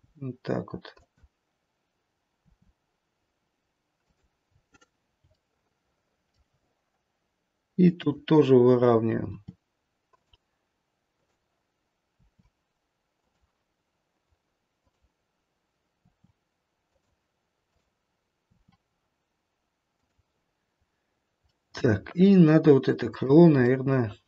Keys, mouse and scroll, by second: 2.4 r, 4.5-5.4 scroll up 3, 5.4 shift+middle click, 7.9 click, 9.4 r, 11.1 click, 12.1 r, 14.7 click, 16.0 r, 17.5 click, 18.4 r, 20.5-21.5 scroll down 1, 21.5 middle click, 22.9 click, 23.9 middle click.